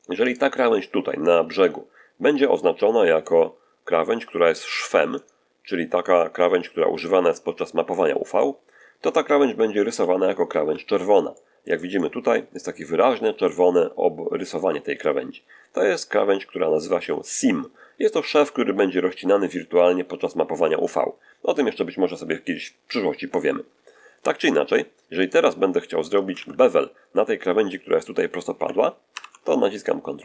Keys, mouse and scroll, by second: 0.1 shift+click, 5.0 click, 8.2 click, 9.8 z, 10.5 a, 11.2 shift+middle click, 11.8-12.8 shift+middle drag, 25.1 click, 26.2 ctrl+z, 29.0 ctrl+b.